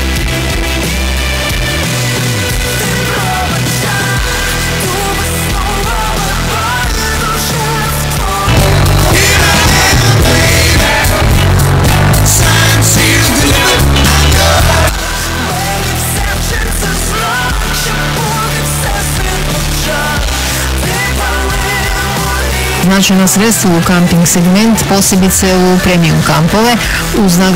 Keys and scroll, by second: 14.8 Page_Down.